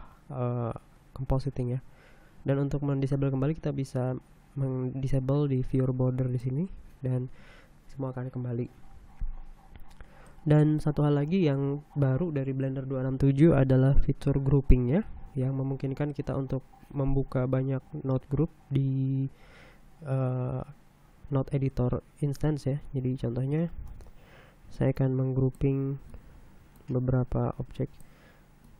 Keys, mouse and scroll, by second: 3.7-4.3 scroll down 3, 7.0 middle click, 10.3 scroll up 2, 10.9 middle click, 15.7-16.3 scroll up 2, 16.7 middle click, 24.2 click, 25.4-26.4 drag, 26.7 click, 28.1 click.